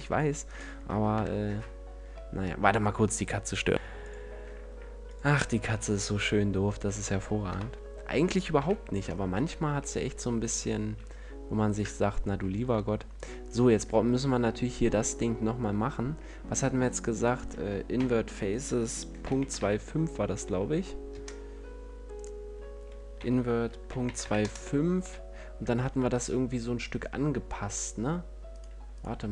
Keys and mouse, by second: 1.1 KP_Decimal, 5.0-6.6 drag, 6.6 middle click, 7.4 click, 7.4 KP_1, 8.2 click, 8.4 KP_5, 9.2 Tab, 12.4 ctrl+Tab, 13.3-15.8 drag, 17.1-19.0 right drag, 22.0-23.9 right drag, 25.7 ctrl+Tab, 27.4 Tab, 29.0 Tab.